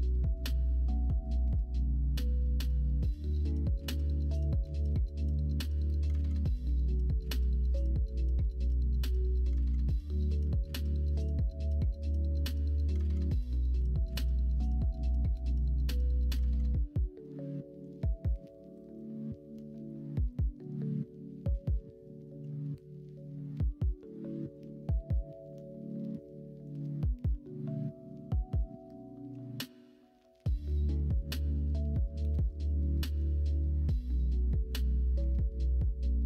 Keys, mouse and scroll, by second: 16.5 middle click, 17.2 middle click, 18.2 KP_1, 18.7 KP_3, 22.5 ctrl+r, 29.3 e.